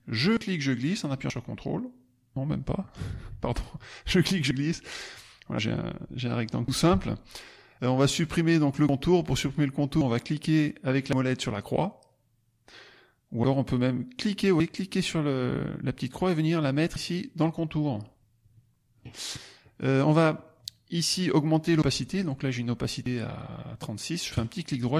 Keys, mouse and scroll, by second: 0.0-1.2 drag, 3.3 ctrl+z, 4.0-5.0 drag, 14.3-17.2 drag, 20.2 click, 24.3 click.